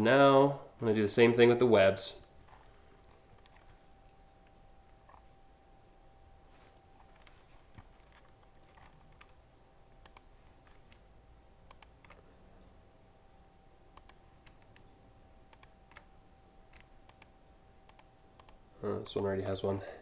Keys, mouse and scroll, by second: 0.6 ctrl+click, 1.2 scroll up 3, 2.1 alt+scroll up 1, 4.7 scroll down 2, 6.6 scroll up 2, 8.4 alt+scroll up 1, 9.6 click, 11.3 ctrl+click, 13.5 click, 15.1 ctrl+click, 16.7 ctrl+click, 17.5 ctrl+click, 18.0 ctrl+click, 18.7 ctrl+click, 19.3 scroll down 1, 19.7-20.0 alt+scroll up 6.